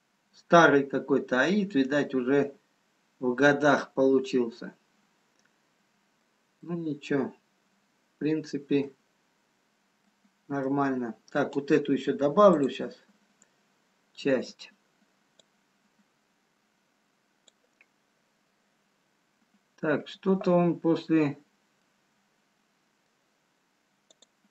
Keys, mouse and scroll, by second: 0.0-0.3 scroll up 2, 1.4 scroll down 1, 3.5 scroll up 2, 4.4 scroll down 1, 4.8 middle click, 6.8 middle click, 9.2-10.0 scroll up 2, 10.0 middle click, 12.4 click, 13.2 scroll up 2, 16.9 click, 20.8-21.8 scroll down 2, 21.8 middle click, 24.1 click.